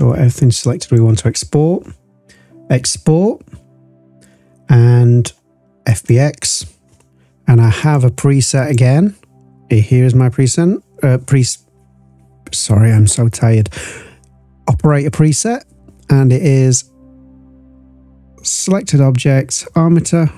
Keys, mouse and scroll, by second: 0.8-6.1 drag.